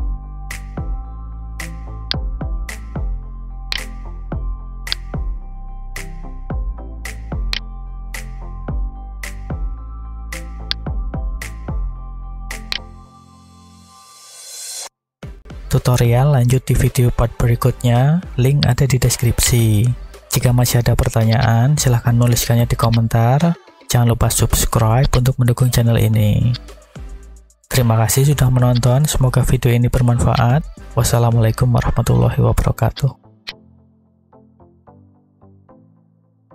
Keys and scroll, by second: 18.0 b, 19.9 g, 20.6 y, 23.5 g, 24.6 y, 25.6 a.